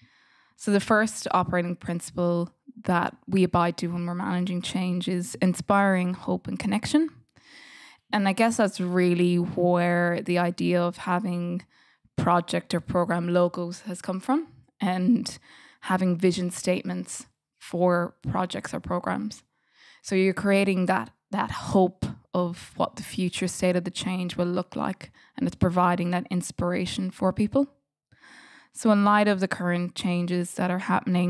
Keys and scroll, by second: 28.0 F8.